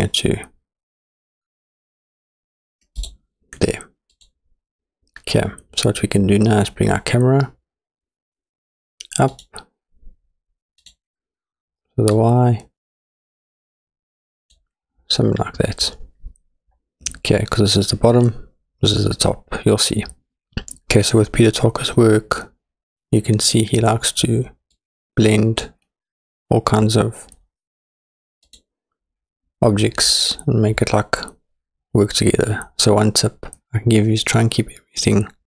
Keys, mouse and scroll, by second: 4.1 click, 9.3 click, 10.8 click, 12.2 click, 14.1 click, 15.4-18.5 scroll up 1, 24.7 click, 26.9-27.9 scroll down 4, 28.5 click.